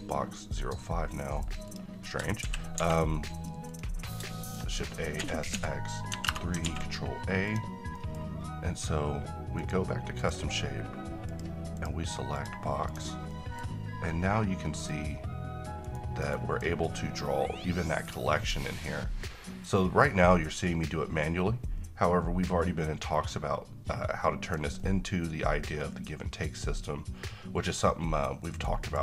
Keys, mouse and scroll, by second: 0.3-1.5 middle drag, 1.7 click, 2.0 middle click, 2.4 c, 2.8 a, 3.7 click, 4.0 scroll down 1, 4.3 shift+middle click, 4.6-5.2 shift+scroll down 2, 5.2 s, 5.5 x, 6.7 ctrl+a, 7.5 click, 8.0 middle click, 9.6 click, 13.3 middle click, 14.9-16.8 click, 15.8-18.1 right drag, 18.1-24.7 drag, 24.8-25.7 middle drag, 28.8 click.